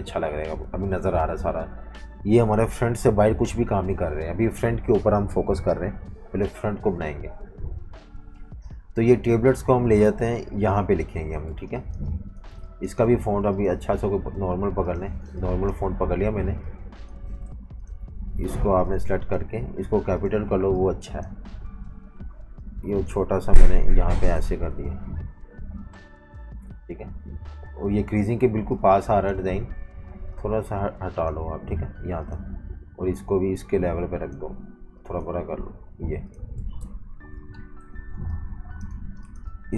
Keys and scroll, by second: 11.5-12.5 typing, 15.1 typing, 17.5 super+z, 24.5 Left, 24.7 Down, 25.4 Down, 25.5 typing, 25.8 Down, 28.4-30.1 typing, 36.6 v, 36.8 super+-, 36.9 super+-, 37.8-39.7 typing.